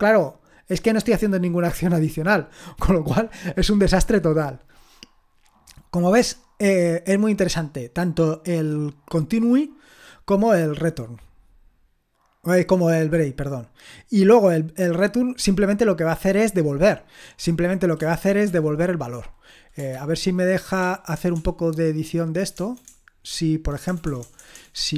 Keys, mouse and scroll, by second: 6.4-9.2 scroll down 3, 9.2-10.4 scroll down 1, 10.4-13.3 scroll down 1, 13.3-13.9 scroll down 1, 13.9-17.1 scroll down 1, 17.1 scroll down 1, 17.4 click, 18.5 ctrl+l, 19.9 ctrl+p, 20.8-24.9 typing.